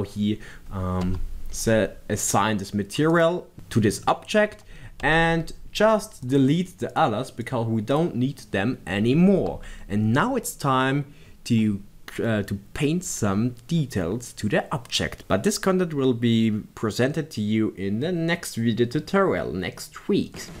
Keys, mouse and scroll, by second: 1.2 b, 3.4 click, 5.2 Tab, 6.5 click, 7.3-20.6 drag.